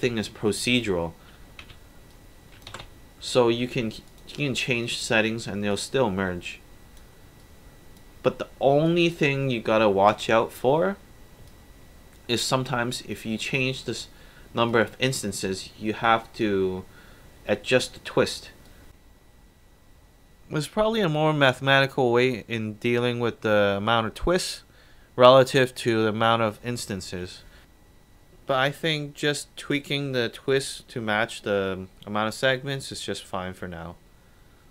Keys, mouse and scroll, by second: 0.2-1.7 typing, 2.1-2.6 drag, 2.8 ctrl+z, 4.1 click, 5.7-6.2 drag, 7.4-8.0 alt+drag, 8.9 alt+click, 10.0 KP_3, 10.2 Return, 11.5-13.4 alt+drag, 14.7-15.2 alt+drag, 18.7 click, 20.2 click, 23.6-25.1 alt+drag, 27.0 click, 27.9 click, 32.9 click, 33.7-34.4 alt+drag, 34.6 alt+right drag.